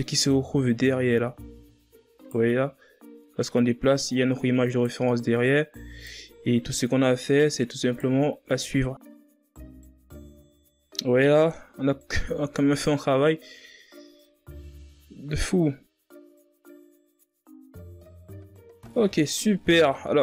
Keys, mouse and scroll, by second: 0.2 right click, 2.3 right click, 5.5 right click, 7.0 right click, 8.6 right click, 10.2 right click, 10.9 right click, 12.0 right click, 12.1 scroll down 6, 12.4-12.9 scroll up 3, 12.9 ctrl+scroll down 1, 13.3-13.6 scroll up 1, 13.7-14.2 ctrl+scroll down 1, 14.9-15.8 scroll up 1, 15.8 right click, 18.1 scroll down 3, 18.3 scroll up 2, 18.4 Tab, 18.5 scroll down 2, 18.6 middle drag, 18.8-19.8 scroll up 5, 18.9 middle click, 19.3 KP_1, 19.8 Tab, 20.1 right click.